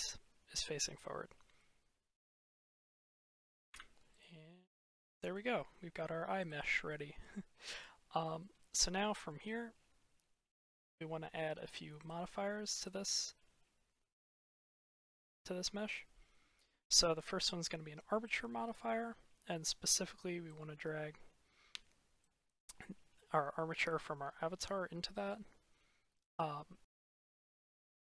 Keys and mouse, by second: 0.6-0.9 middle drag, 1.5-2.2 middle drag, 2.7 shift+middle drag, 3.6 Return, 4.0 click, 4.7-5.2 middle drag, 5.4-5.8 shift+middle drag, 6.3 click, 8.3 click, 11.9 click, 15.0-18.2 drag, 20.4-21.4 drag, 26.8 ctrl+z.